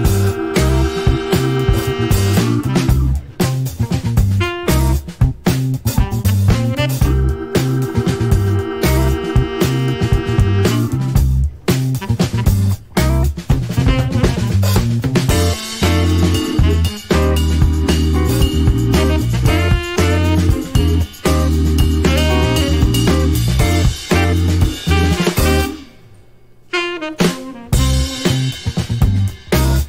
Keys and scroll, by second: 22.6 shift+Left, 23.2 alt+a.